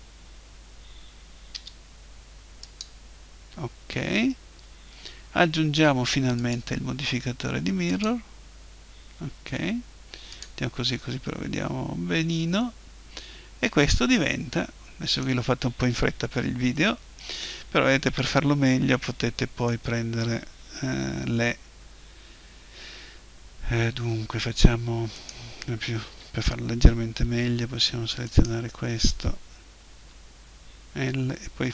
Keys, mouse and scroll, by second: 1.5 Delete, 6.4-8.3 drag, 10.3-12.1 drag, 12.6-14.4 middle drag, 16.8-18.6 middle drag, 25.2-27.1 right drag, 26.1 l, 28.2-30.2 right drag, 30.0 l.